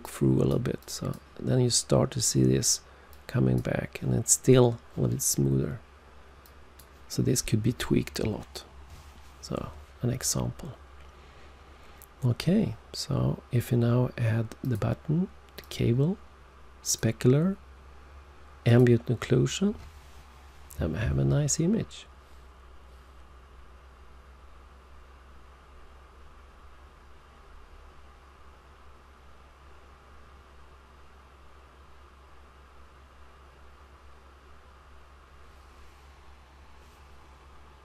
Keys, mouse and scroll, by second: 0.0 click, 0.7 click, 3.0 click, 6.3 click, 14.5 click, 15.5 click, 16.7 click, 18.6 click.